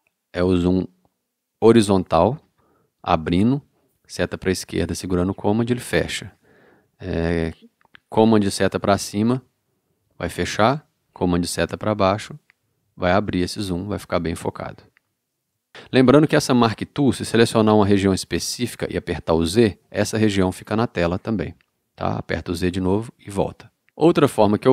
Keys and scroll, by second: 4.2 super+Left, 8.7 super+Up, 11.5 super+Down, 12.9 super+Down, 14.4 super+Up, 22.7 z.